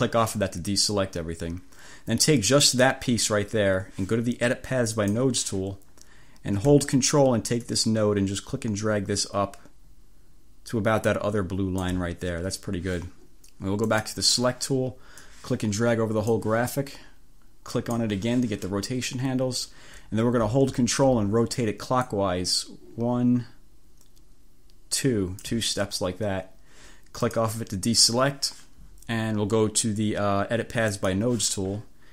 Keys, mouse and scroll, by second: 2.5 click, 5.0 click, 7.6-12.2 ctrl+drag, 14.0 click, 15.4-16.6 drag, 17.8 click, 22.1-25.8 drag, 27.3 click, 31.0 click.